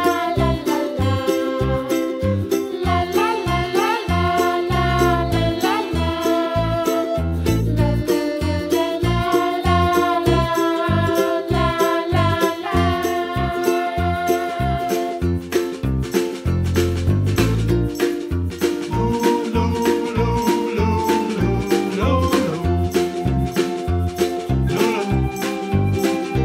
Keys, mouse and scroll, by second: 0.2-0.5 scroll down 1, 0.5 middle click, 1.3 e, 3.3-4.8 middle drag, 5.1 middle click, 5.6 click, 5.8 scroll down 2, 6.0-7.1 middle drag, 7.1 shift+a, 8.9 KP_Decimal, 9.1-9.6 scroll down 5, 9.6-10.4 middle drag, 10.4 s, 11.9 s, 13.0 s, 13.9 KP_Decimal, 14.1-14.8 middle drag, 14.8 shift+a, 17.1-18.8 drag, 19.4-20.0 scroll down 2, 20.0 r, 22.2 s, 23.0-24.2 middle drag, 25.8 click.